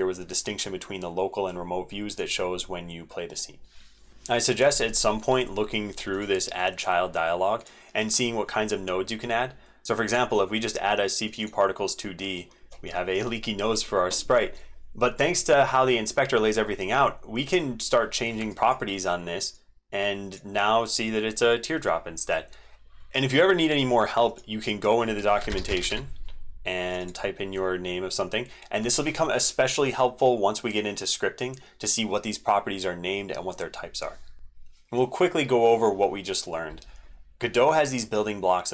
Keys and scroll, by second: 4.1 ctrl+z, 34.5 ctrl+F5.